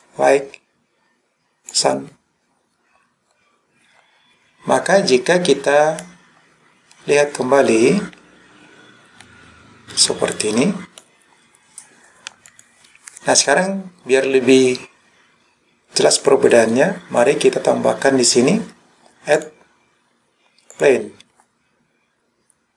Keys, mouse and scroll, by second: 6.1-11.0 middle drag, 12.5 click, 19.4-20.9 drag.